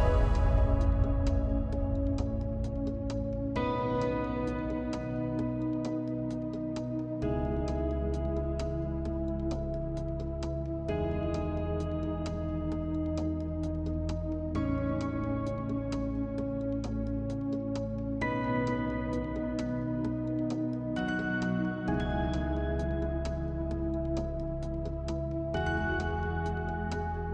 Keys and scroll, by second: 14.9 space.